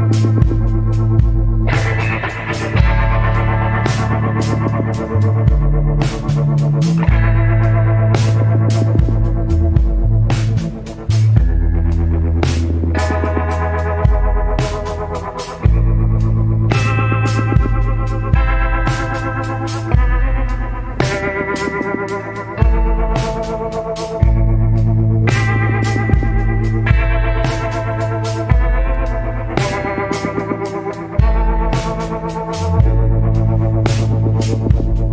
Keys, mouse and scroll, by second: 17.1 scroll down 1, 18.1 scroll up 1, 28.7-29.2 scroll down 1.